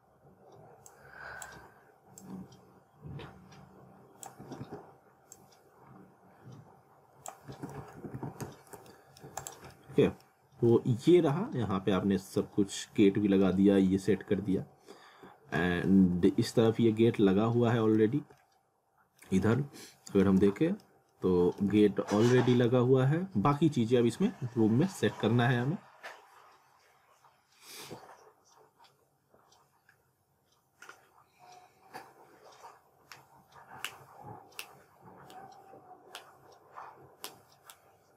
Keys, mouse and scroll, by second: 0.9 click, 1.6 r, 2.2 click, 4.4 typing, 5.3 click, 7.3-8.9 typing, 8.9 middle click, 9.4 click, 9.7 middle click, 10.3-10.7 scroll down 1, 10.7 middle click, 11.5 scroll down 1, 11.7 middle click, 12.8 middle click, 14.1 middle click, 15.8 middle click, 16.9 scroll up 1, 17.2 alt+middle click, 18.2 scroll down 1, 18.4 alt+middle click, 19.5 middle click, 20.5 middle click.